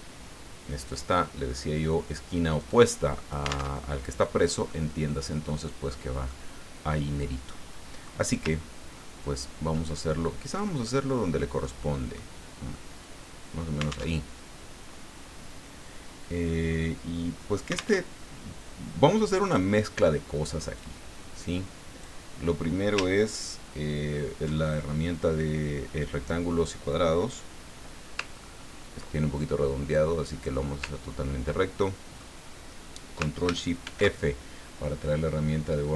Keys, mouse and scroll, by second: 0.8 click, 2.6-3.7 drag, 3.7 alt+Tab, 4.7-5.7 drag, 6.3-8.3 drag, 8.6-9.1 ctrl+scroll up 4, 10.6 click, 11.0-12.3 drag, 12.7-13.7 drag, 14.2 alt+Tab, 18.0 alt+Tab, 19.4 click, 20.8-22.2 drag, 28.3-28.9 ctrl+scroll up 2, 28.9 ctrl+scroll up 1, 29.9 click, 30.9 ctrl+scroll down 2, 31.6 ctrl+click, 33.8 ctrl+shift+f.